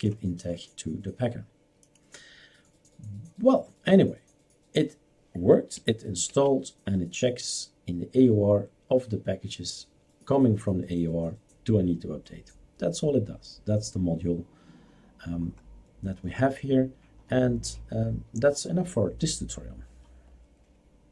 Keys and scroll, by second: 6.3 shift+super+q.